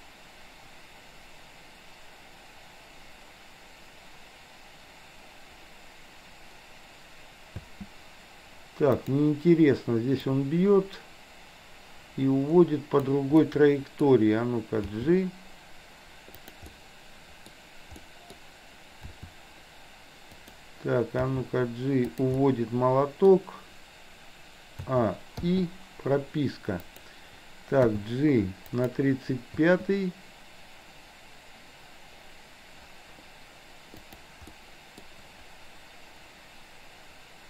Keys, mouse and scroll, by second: 7.6 space, 9.0 click, 10.4-13.1 drag, 13.5-14.1 middle drag, 14.9 g, 16.6-17.6 middle drag, 18.0 scroll up 1, 18.1 middle click, 19.2 r, 21.4 g, 22.4-23.4 middle drag, 24.9 a, 25.5 i, 26.7 click, 27.9 g, 29.7 space, 34.1 click, 34.6 middle click.